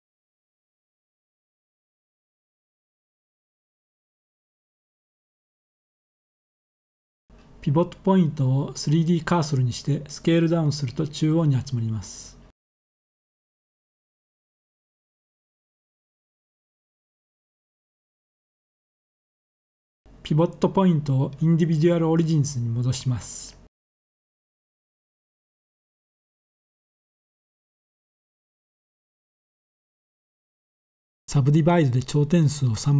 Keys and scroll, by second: 9.1 s, 10.6 z, 25.4 Escape, 25.5 typing.